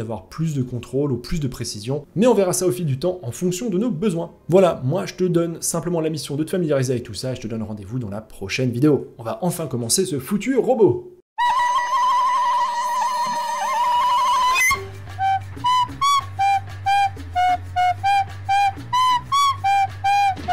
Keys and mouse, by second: 0.8-1.3 middle drag, 1.9 middle click, 3.5-4.3 middle drag, 4.4-6.6 middle drag.